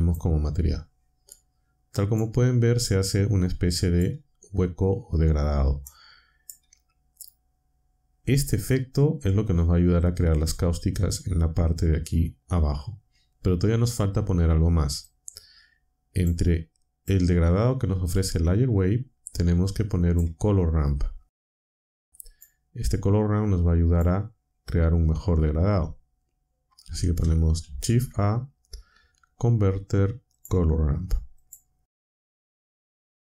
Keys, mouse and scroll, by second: 2.1-4.2 drag, 5.8 click, 15.0-16.4 drag, 17.1-18.0 drag, 20.5-21.1 drag, 21.7-22.6 drag, 23.4-24.1 drag, 27.6 a, 30.3 click, 31.4 click, 32.9 click.